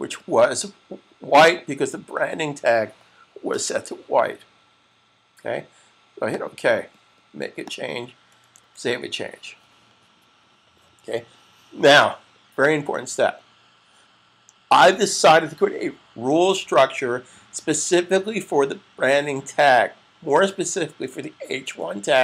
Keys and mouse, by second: 6.3 click.